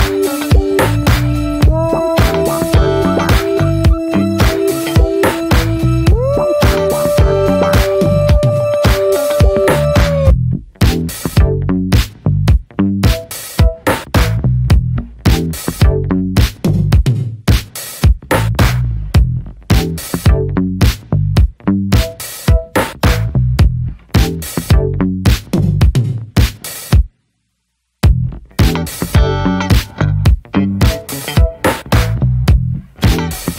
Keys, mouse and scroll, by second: 0.2 scroll down 2, 0.6-1.3 middle drag, 1.3 drag, 2.3-3.5 drag, 3.5-3.9 middle drag, 3.9 alt+z, 4.2-4.9 middle drag, 4.9 alt+z, 5.3-5.9 middle drag, 5.9 scroll up 2, 6.1 Tab, 6.5 Tab, 7.1-8.4 middle drag, 8.4 drag, 8.7 scroll down 1, 9.0-9.4 middle drag, 9.4-13.5 drag, 13.5-15.8 middle drag, 15.8-20.0 drag, 21.1 click, 22.9-24.1 shift+middle drag, 24.1 click, 24.5-26.2 shift+middle drag, 26.2-29.4 drag, 29.8-30.3 middle drag, 30.3 scroll up 2, 30.6-32.5 shift+middle drag, 32.5-33.5 drag.